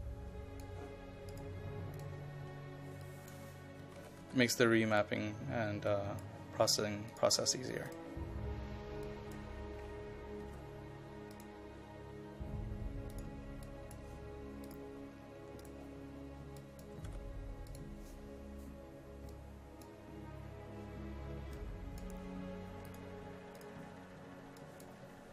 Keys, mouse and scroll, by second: 3.8 KP_1, 4.0 KP_2, 4.3 KP_8, 4.9 click, 10.5 KP_6, 10.6 KP_4, 11.3-17.0 drag, 17.0 KP_6, 17.1 KP_4, 17.7-25.3 drag.